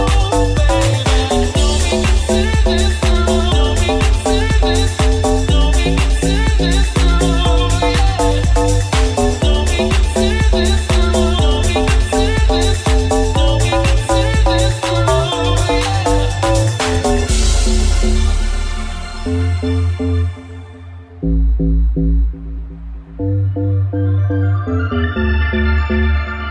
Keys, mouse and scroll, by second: 4.6 Tab, 5.2 alt+z, 6.1 alt+z, 7.4 right click, 7.4-14.6 middle drag, 10.6 alt+z, 14.6-26.2 alt+middle drag, 16.6 alt+z, 24.5 shift+d, 25.4 p, 25.9 Tab, 26.2 right click, 26.3 middle click.